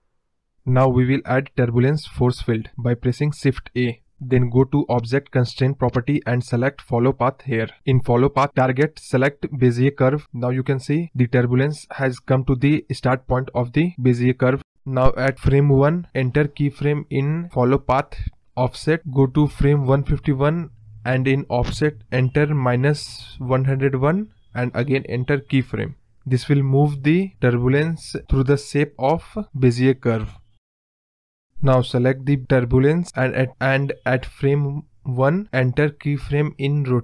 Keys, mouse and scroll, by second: 1.3 shift+a, 3.9 scroll up 2, 4.2-4.8 middle drag, 4.8 scroll up 2, 5.0-5.6 middle drag, 5.6 scroll down 2, 5.7-7.2 middle drag, 7.2 click, 7.7-8.1 scroll down 1, 9.0-10.5 drag, 10.5 scroll down 2, 10.6 middle click, 11.2 scroll up 2, 11.3 middle drag, 11.6-11.9 scroll down 4, 11.9-13.4 middle drag, 13.6-15.2 drag, 15.8-16.6 drag, 16.6 Right, 17.2-18.7 drag, 22.0 scroll down 2, 22.1-22.5 middle drag, 22.5 scroll up 2, 24.4 click, 25.5 click, 26.1 KP_0, 26.7 space, 30.9 space, 31.0-31.9 scroll down 2, 31.9 click, 33.4 click, 34.8-36.3 drag, 36.4-37.0 drag.